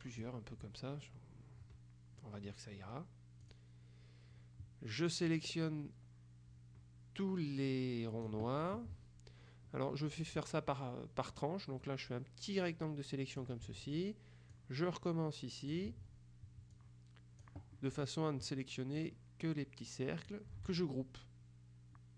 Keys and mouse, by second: 3.5 click, 5.4-8.8 drag, 10.4-14.0 drag, 14.6-16.3 shift+drag, 16.8-18.0 drag, 19.0-20.9 drag.